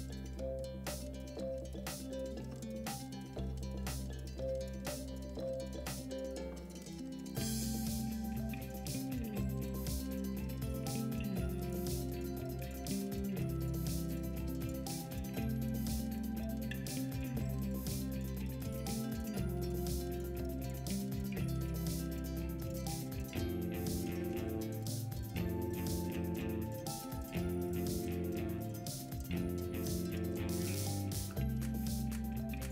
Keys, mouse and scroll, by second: 12.8-13.2 middle drag, 14.8-16.0 middle drag, 27.9-28.3 middle drag.